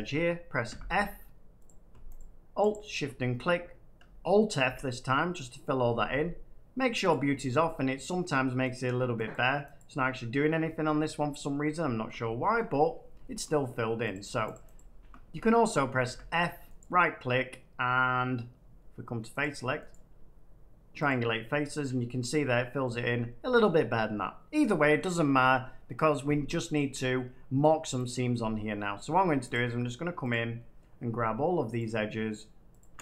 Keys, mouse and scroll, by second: 1.6 click, 2.1 click, 2.6 click, 4.5 alt+f, 5.6 middle click, 6.4 middle click, 7.0 click, 8.7 click, 9.2 click, 9.7 click, 11.5 middle click, 12.0 shift+middle click, 12.5 middle click, 12.7 middle click, 12.7 middle click, 12.9 middle click, 13.3 shift+middle click, 14.0 click, 14.4 click, 14.7 click, 16.0 f, 16.7 right click, 19.3 click, 19.8 right click, 21.0 click, 21.6 click, 21.8 middle click, 23.0-24.6 middle drag, 24.6-24.9 scroll down 1, 24.9 middle click, 25.8-26.4 scroll, 26.4 shift+middle click, 28.0 click, 29.4 click, 30.2 click, 30.7 middle click, 31.7 click, 32.7 click.